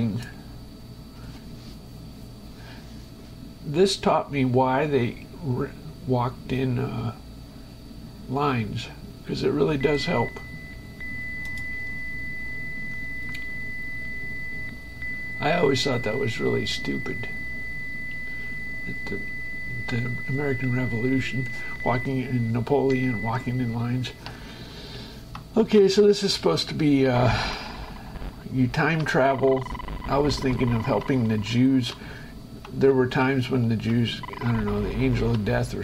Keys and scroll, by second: 23.4 shift+Escape, 25.1 Right, 26.0 space, 27.1 Left, 27.4 space, 27.9 Left, 29.4 Right, 29.6 space, 31.5 Left, 32.3 Right, 33.1 Left, 33.9 Right, 34.4 Left, 34.6 space.